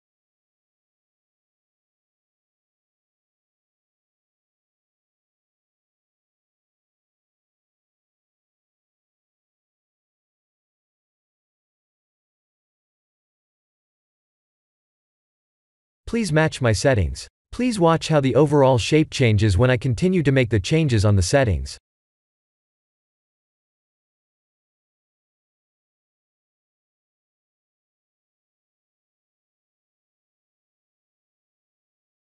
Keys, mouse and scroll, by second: 0.9 click, 2.9-3.9 scroll down 6, 3.9-5.7 scroll down 1, 5.7 click, 12.5 click, 14.0-15.2 scroll up 5, 15.2-17.2 scroll down 5, 19.5 click, 26.7-27.5 scroll up 5, 27.5-28.5 scroll up 1, 29.6 click, 30.7 click, 32.1 click.